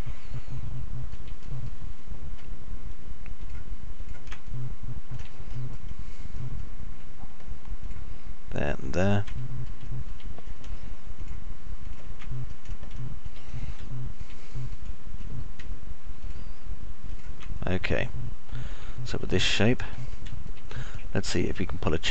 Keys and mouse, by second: 2.0 middle click, 4.0 ctrl+click, 4.5 ctrl+click, 5.1 alt+middle click, 6.1 middle click, 8.3 ctrl+click, 9.3 ctrl+click, 10.0 middle click, 10.5 alt+middle click, 11.6 ctrl+click, 12.3 ctrl+click, 12.6 middle click, 13.5 alt+middle click, 14.1 alt+middle click, 15.0 middle click, 16.6 ctrl+click, 18.5 alt+middle click, 19.5 middle click, 20.0 alt+middle click, 20.5 middle click, 21.0 alt+middle click, 21.3 middle click.